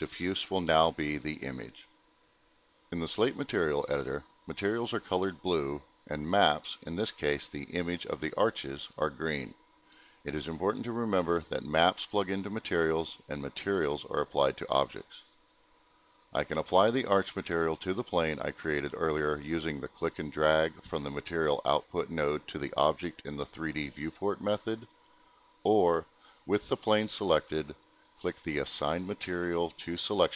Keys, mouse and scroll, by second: 2.7 click, 3.9 click, 5.9 click, 6.0 click, 6.2 double click, 7.5 click, 8.6 click, 10.2 click, 11.2 click, 14.0 middle click, 14.4 scroll down 1, 15.4 middle click, 16.8 middle click, 18.4 click, 30.1 click, 30.3 click.